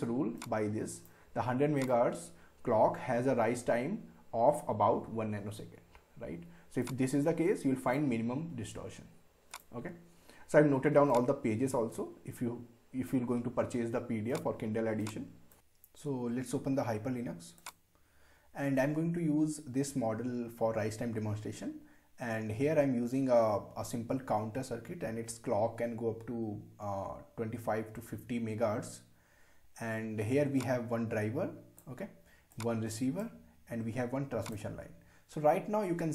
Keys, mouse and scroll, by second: 0.4-1.7 drag, 6.8-15.5 drag, 17.6 click, 30.6-34.5 drag.